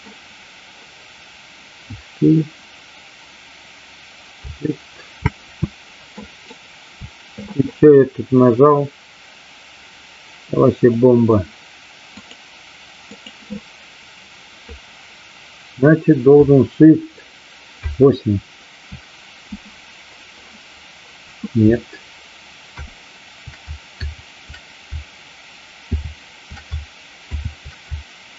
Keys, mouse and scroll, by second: 5.1 shift+space, 6.1 right click, 12.3 click, 17.8 shift+F8, 25.9 shift+F2, 25.9 shift+F4.